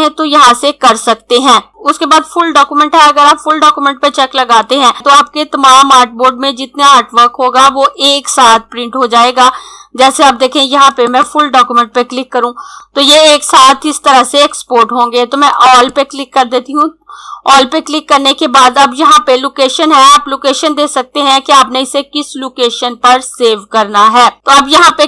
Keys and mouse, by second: 10.9 click, 15.6 click, 24.9 click.